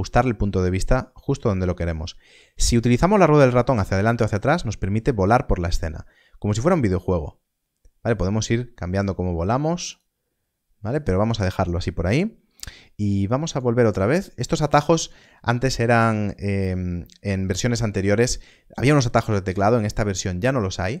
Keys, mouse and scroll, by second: 3.4-3.7 scroll down 1, 6.1 scroll up 1, 9.8 scroll up 1, 9.9 click, 13.4 click.